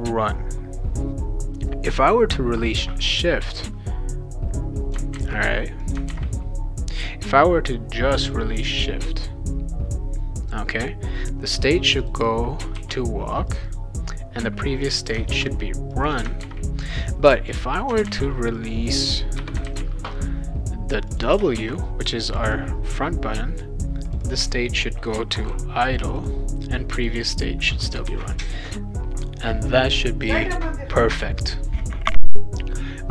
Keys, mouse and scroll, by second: 3.6-4.9 drag, 5.1 ctrl+c, 5.8 click, 6.1 ctrl+v, 12.0 click, 12.2 click, 12.7 shift+w, 13.5 click, 13.7 click, 14.8 click, 15.0 click, 15.3 ctrl+c, 15.9 click, 16.4 ctrl+v, 16.8-17.9 drag, 18.0 ctrl+c, 18.6 click, 19.4 Return, 19.6 ctrl+v, 21.1 click, 21.6 shift+w, 22.3 click, 22.4 click, 24.1 click, 24.2 click, 25.2 shift+i, 26.0 click, 26.2 click, 26.9 click, 27.1 click, 28.1 ctrl+s, 28.3 click.